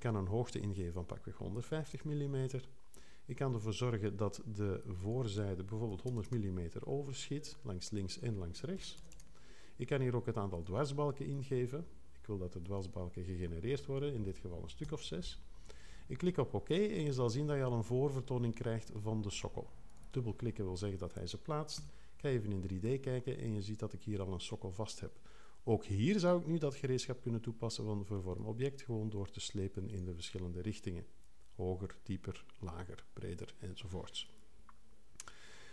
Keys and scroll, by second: 1.3-2.4 typing, 5.7-6.6 typing, 8.8 i, 14.8 6, 21.7 3.